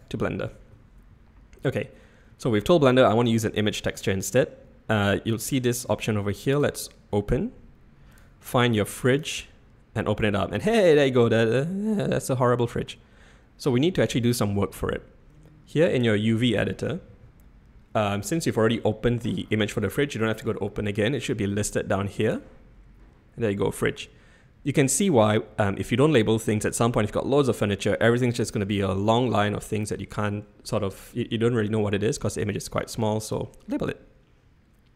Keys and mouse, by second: 6.5 click, 22.2-33.4 drag.